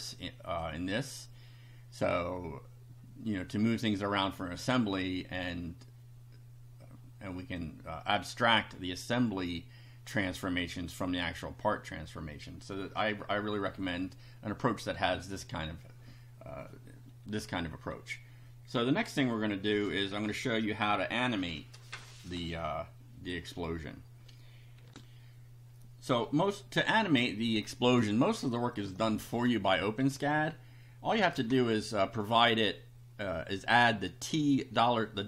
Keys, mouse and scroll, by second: 0.6 click, 3.7-4.8 drag, 7.6-8.7 drag, 24.9 ctrl+r, 28.0 scroll up 2, 28.8 click, 31.1 Return.